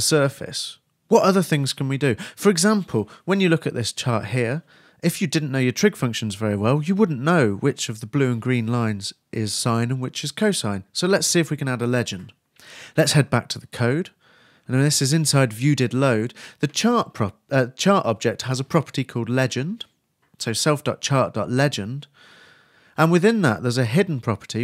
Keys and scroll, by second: 23.0-23.8 typing, 24.1 shift+super+o, 24.2 shift+super+s.